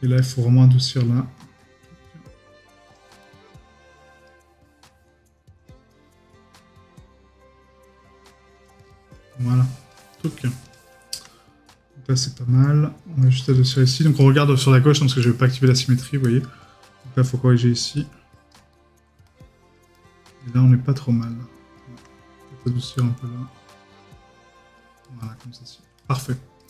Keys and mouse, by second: 4.6 middle click, 13.7 right click, 14.3 middle click.